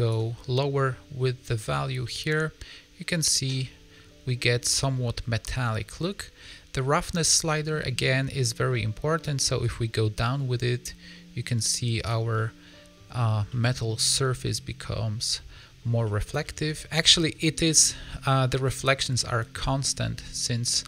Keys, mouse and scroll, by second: 2.0 middle click, 5.4 middle click, 7.9 middle click, 9.5 click, 12.3 middle click, 13.4 middle click, 16.0 middle click, 16.3 shift+middle click, 16.6 scroll up 4, 17.0 middle click, 18.0 scroll down 3, 18.2 middle click.